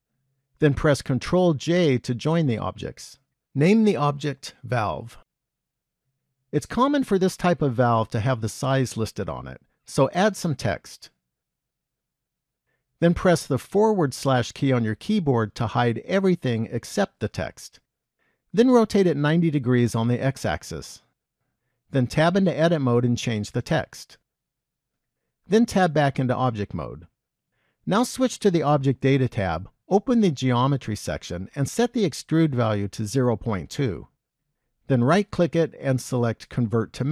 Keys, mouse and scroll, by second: 1.9 ctrl+j, 3.9 click, 8.1 middle click, 10.4 shift+a, 14.0 /, 19.2 r, 22.4 Tab, 23.0-25.5 typing, 26.3 Tab, 29.0 click, 30.5 click, 31.9 click, 35.6 right click.